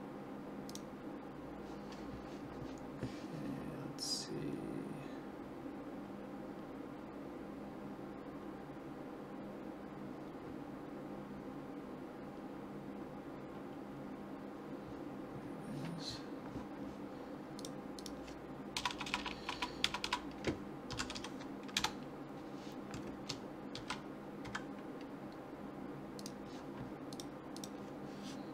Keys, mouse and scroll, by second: 17.6-19.1 drag, 18.9-19.8 typing, 23.8 shift+d, 27.2-28.5 drag.